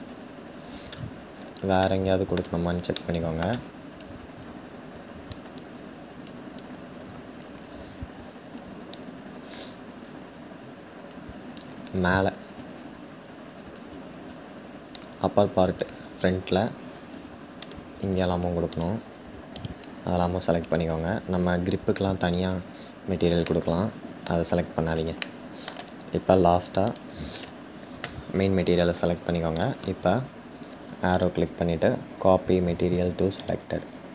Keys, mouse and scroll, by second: 1.7-5.0 shift+middle drag, 5.0-12.6 drag, 13.1-14.6 scroll up 1, 14.6-17.3 drag, 22.2-23.3 scroll down 2, 23.3-24.2 middle drag, 24.2-24.9 scroll down 1, 24.9-26.6 shift+middle drag, 26.6 shift+click, 33.6 click.